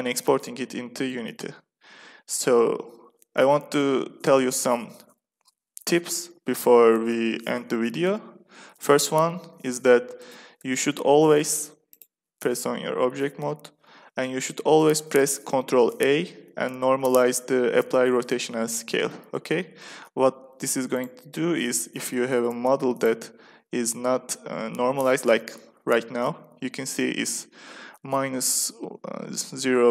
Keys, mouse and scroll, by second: 4.1-6.1 middle drag, 8.3-10.1 middle drag, 10.1 Tab, 10.5 Tab, 11.3 Tab, 11.8-13.5 drag, 15.7 ctrl+a, 20.8-25.4 drag.